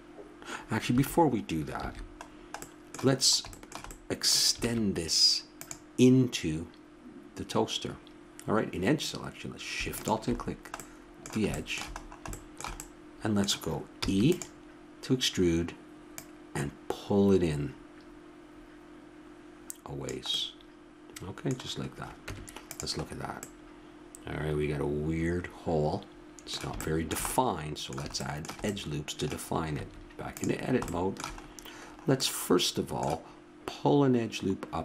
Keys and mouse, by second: 1.7 ctrl+z, 4.6 ctrl+Tab, 9.9-11.9 drag, 11.9 middle click, 14.0 e, 16.1-17.8 drag, 22.3 Tab, 23.4 middle click, 24.9-26.8 middle drag, 29.7 Tab, 30.7 middle click.